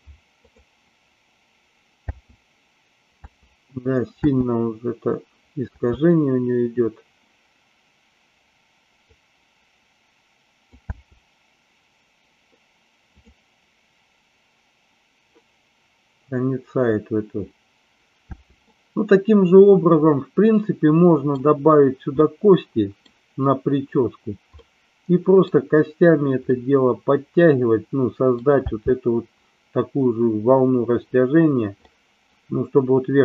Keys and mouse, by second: 0.4 click, 2.0 space, 9.0-10.7 drag, 10.8 space, 18.3 space, 18.7-21.3 middle drag, 22.2-23.0 middle drag, 24.6-25.4 middle drag, 26.4-28.4 middle drag, 28.6 space, 31.7 middle click.